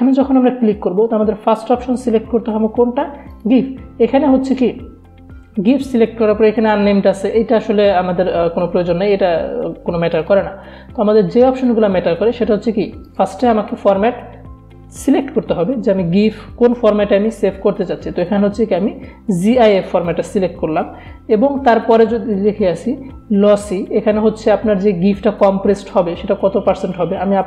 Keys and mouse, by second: 6.3 click, 10.3 click, 13.2 click, 20.1 click.